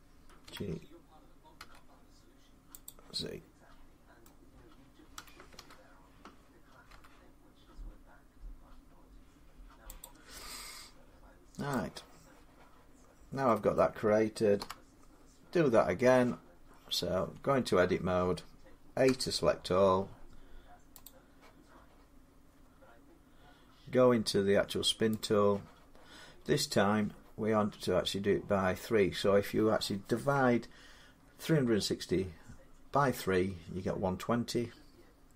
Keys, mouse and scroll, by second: 0.3 g, 1.4 z, 2.7 click, 4.1 middle click, 5.0-5.4 typing, 6.7 x, 9.8 click, 11.5 click, 11.5 middle click, 13.6 middle click, 14.4 7, 17.0 Tab, 18.9 a, 20.9 click, 21.2 click, 25.0 click, 27.8-30.2 drag.